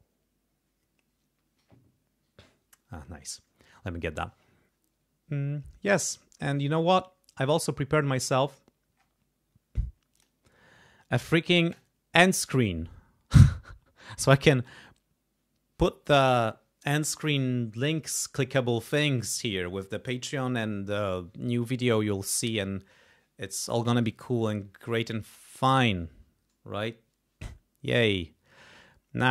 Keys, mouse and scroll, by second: 10.1 click, 11.7 click.